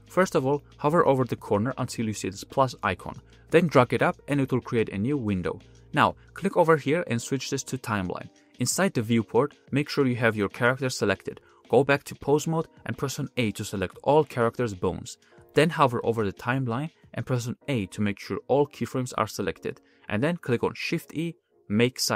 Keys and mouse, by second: 3.3-5.7 drag, 6.4-8.6 drag, 10.5 click, 12.9 ctrl+Tab, 13.8 a, 14.0 a, 14.6 a, 16.6 a, 16.7 a, 17.1 a, 18.0-19.8 drag, 20.4 shift+e.